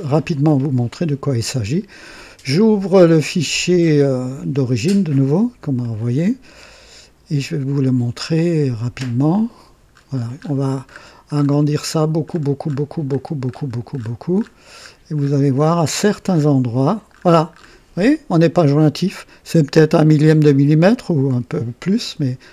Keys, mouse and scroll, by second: 0.0 click, 5.8 click, 9.3 click, 9.9-16.6 scroll up 20, 17.1-17.8 scroll up 2.